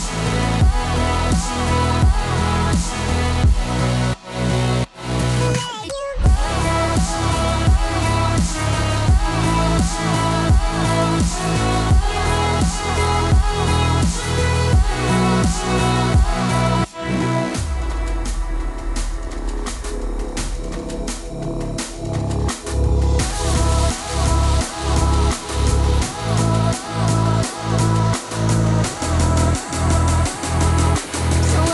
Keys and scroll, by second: 8.7 t, 10.9 t, 26.2 F9.